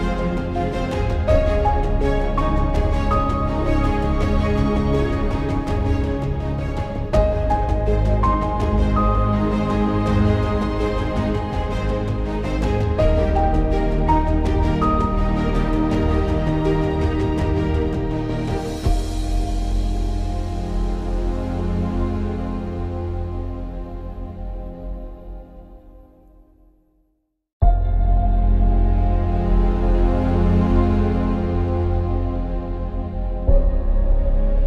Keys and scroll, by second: 17.5 ctrl+-, 17.5 ctrl+-, 17.7 ctrl+-, 17.9 ctrl+-, 18.1 ctrl+-, 18.4 ctrl+-, 24.3 ctrl+=, 24.5 ctrl+=, 24.9 ctrl+=, 25.7 ctrl+=.